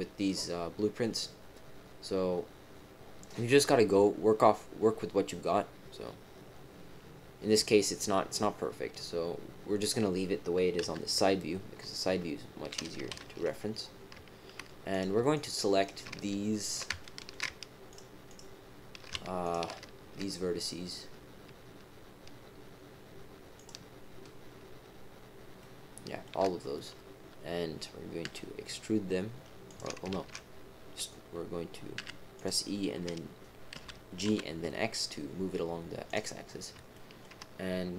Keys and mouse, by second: 10.7 KP_3, 12.0 KP_1, 13.1 ctrl+KP_1, 14.9 click, 15.3 shift+click, 15.8 shift+click, 16.6 shift+click, 17.0 shift+click, 17.8 shift+click, 18.2 shift+click, 19.4 shift+click, 25.6 shift+click, 28.2 e, 30.1 ctrl+z, 31.9 e, 33.7 g, 36.9 shift+click.